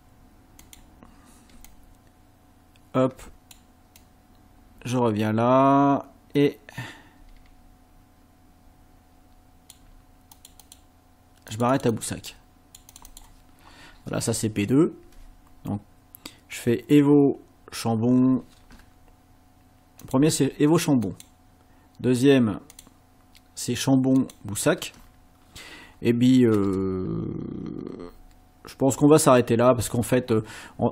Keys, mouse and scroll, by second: 0.6 shift+click, 1.7-3.7 shift+drag, 4.0-9.9 drag, 10.3 click, 11.5 click, 12.3 click, 14.5 ctrl+scroll down 2, 20.0 click, 21.1 click, 22.7 click, 24.2 click, 28.3 ctrl+scroll down 2, 29.5 ctrl+scroll up 2.